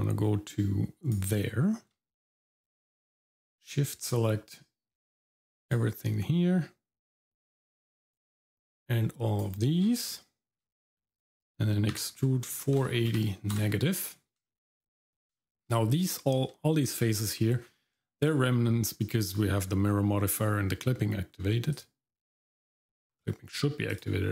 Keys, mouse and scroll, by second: 4.1-5.7 shift+drag, 8.1-9.4 shift+drag, 10.1 shift+middle click, 11.9 e, 14.5 shift+middle click, 15.1 scroll down 1, 15.4 shift+middle click, 16.2 shift+middle click, 17.3 middle click, 17.6-17.9 scroll up 1, 18.0 shift+middle click, 21.7 click, 23.9 click.